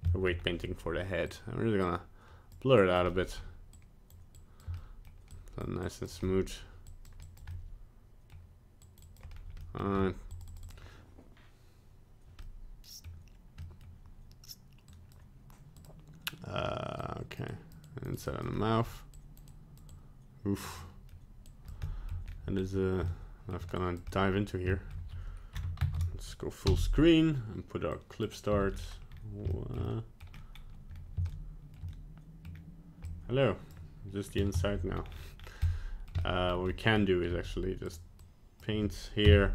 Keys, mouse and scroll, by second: 0.1 shift+middle click, 0.1 shift+middle click, 0.3 scroll down 1, 1.2 click, 1.9 click, 2.8 click, 3.0 middle click, 3.7 click, 4.4 click, 4.7 middle click, 5.3 click, 5.8 click, 6.2 middle click, 6.9 click, 7.2 click, 7.5 middle click, 8.8 click, 9.0 click, 9.3 scroll down 1, 9.6 middle click, 9.9-10.5 scroll up 2, 10.3 click, 10.5 click, 10.6 click, 12.4 middle click, 13.0 middle click, 13.6 middle click, 14.8 click, 15.8 click, 17.0 click, 17.5 click, 17.8 click, 18.3 click, 18.5 middle click, 19.1 click, 19.5 click, 19.9 click, 20.8 middle click, 21.5 click, 21.9 shift+middle click, 22.1 middle click, 22.2-22.7 scroll up 3, 23.0 shift+middle click, 23.8 click, 24.1 middle click, 24.7 shift+middle click, 24.8 shift+middle click, 26.6 ctrl+space, 27.9 n, 28.5 click, 28.8 n, 29.0 scroll down 3, 29.5 scroll up 2, 29.8 shift+middle click, 30.3 middle click, 31.3 scroll up 1, 31.9 shift+middle click, 32.5 middle click, 32.9 shift+middle click, 33.0 scroll up 1, 34.6 click, 34.9 ctrl+z, 35.6-36.2 scroll down 8, 36.2 middle click, 36.6 shift+middle click, 37.3 scroll up 2, 38.2 f, 39.2 click.